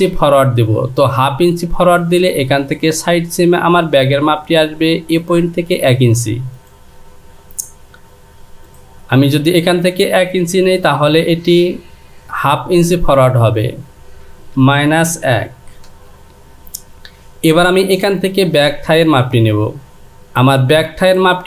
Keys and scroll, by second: 13.6 Down, 14.6 KP_Subtract.